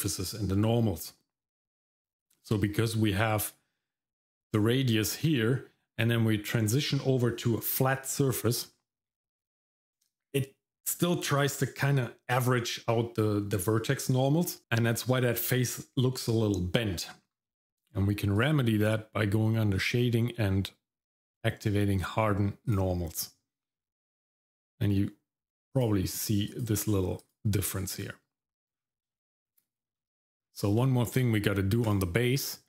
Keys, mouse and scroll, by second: 18.4 click, 22.7 click, 25.7 click, 26.5 click, 27.2 click, 27.9 click, 28.7 scroll down 1, 29.1 shift+middle click, 30.4-30.8 scroll down 1, 30.9 shift+middle click, 31.8 click, 32.4 middle click.